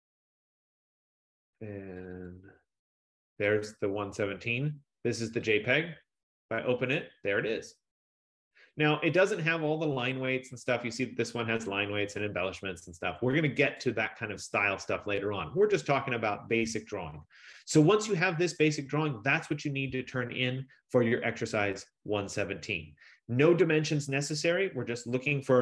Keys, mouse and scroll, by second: 2.1 click, 2.3 click, 3.8 click, 5.6 click, 5.8 click, 10.3 click, 13.9 click.